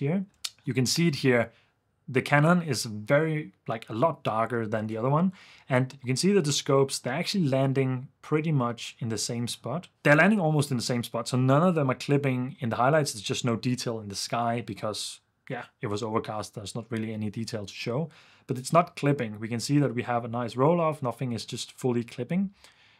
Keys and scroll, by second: 0.3 super+f.